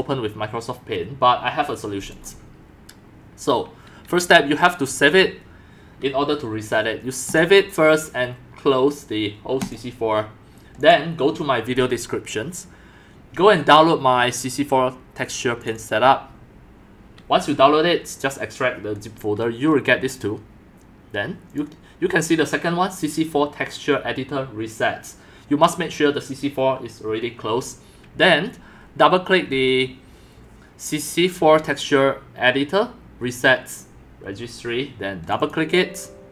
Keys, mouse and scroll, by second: 5.2 click, 10.2 click, 11.8 drag, 15.6 click, 15.7 click, 21.5 click, 25.3-26.7 drag, 31.4-31.9 scroll down 3, 35.2 click, 35.4 click.